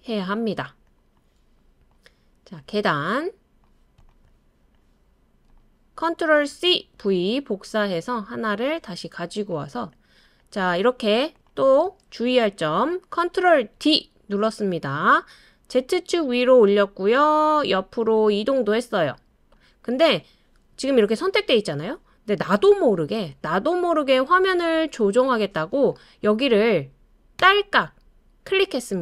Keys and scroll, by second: 6.5 super+c, 7.0 super+v, 13.8 super+d.